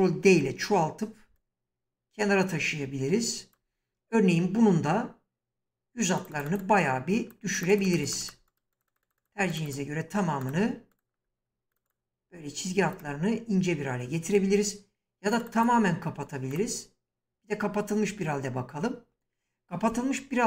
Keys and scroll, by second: 0.3 ctrl+d.